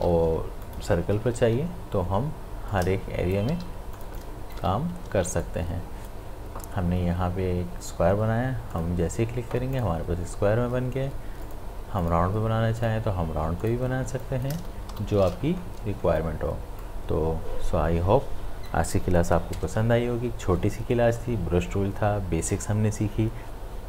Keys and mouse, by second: 0.6 click, 1.2 m, 2.7 click, 3.5 v, 3.9-8.7 drag, 16.8-22.4 drag.